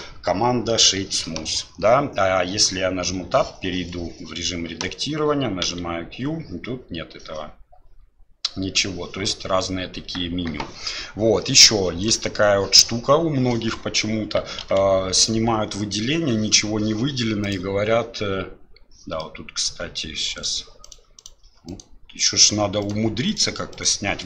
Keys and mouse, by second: 5.7 q, 14.6 alt+a, 17.6-18.2 drag, 19.2-19.6 middle drag, 23.7 right click.